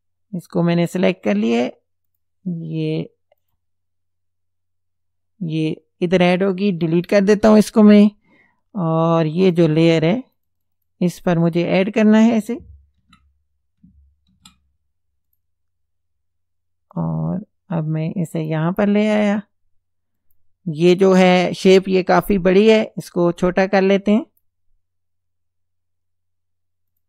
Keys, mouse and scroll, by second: 2.1 click, 3.4 click, 7.3 Delete, 9.5 click, 10.4 click, 13.0 ctrl+a, 14.3 ctrl+v, 15.3 click, 17.0-18.7 drag, 20.2 click, 23.8 click, 26.9 click.